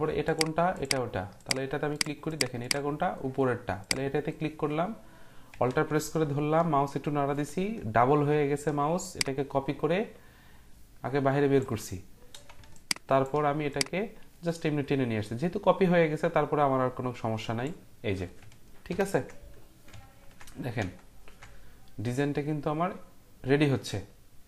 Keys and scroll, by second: 19.4 ctrl+0.